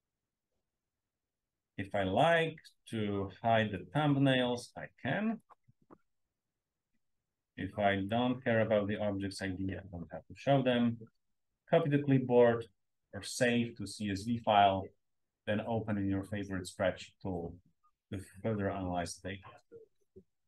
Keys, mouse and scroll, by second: 3.8 click, 5.3 click, 8.0 click, 9.5 click.